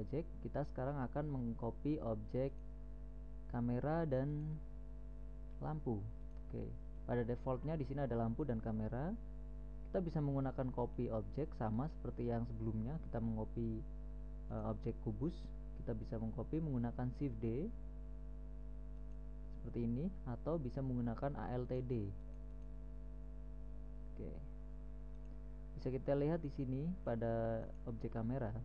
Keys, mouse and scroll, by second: 2.9-4.5 right drag, 4.7-6.3 right drag, 6.3 middle click, 6.6-7.3 right drag, 7.5-8.3 right drag, 8.3-11.3 middle drag, 11.4 middle click, 14.9-16.0 right drag, 16.0-17.2 middle drag, 17.2 right click, 17.8 shift+d, 23.9 alt+d.